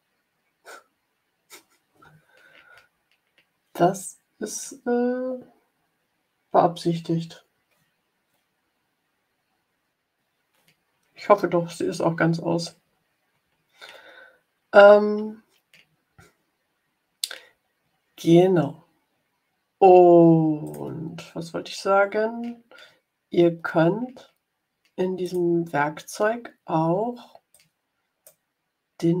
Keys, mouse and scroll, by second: 20.6 click, 25.1 click, 27.4 click.